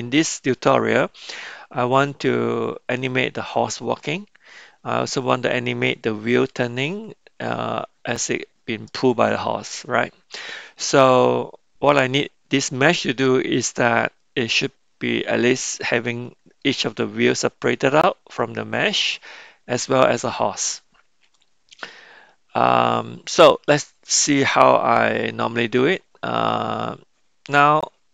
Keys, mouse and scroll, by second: 15.9 middle click, 22.1-23.8 middle drag.